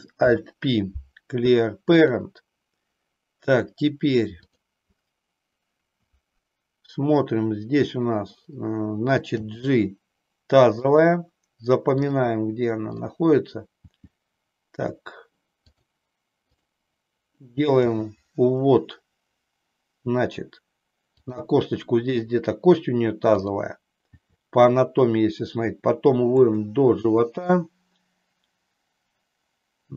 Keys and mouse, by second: 0.2 alt+p, 4.3 click, 9.4 g, 11.0 click, 12.0 click, 13.9 g, 15.8 click, 16.4 click, 17.8 g, 23.3 click, 24.2 g.